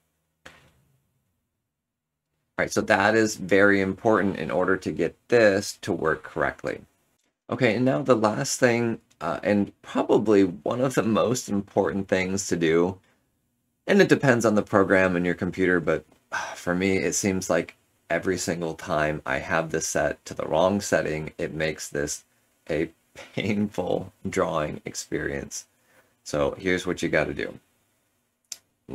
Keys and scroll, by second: 6.9 ctrl+z.